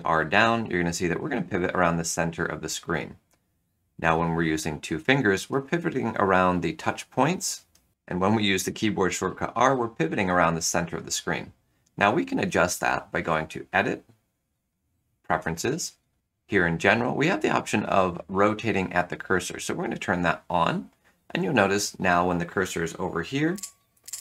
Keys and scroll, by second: 7.9 r, 8.9 r, 23.5 r.